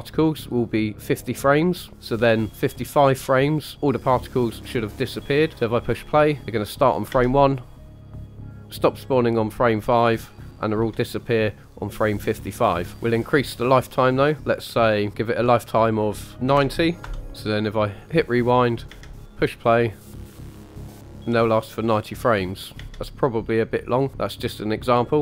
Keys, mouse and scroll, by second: 7.1 space, 10.7 space, 13.1-17.0 drag, 17.7 click, 18.9 space, 22.7 space, 24.1 click.